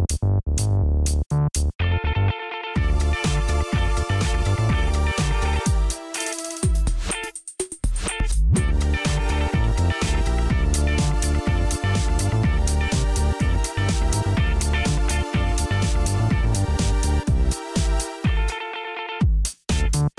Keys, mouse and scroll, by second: 1.5-2.6 drag, 3.3-6.0 drag, 5.8-7.3 typing, 8.8-11.3 typing, 11.5 Return, 13.2-15.7 typing, 16.9 typing, 18.4-20.1 typing.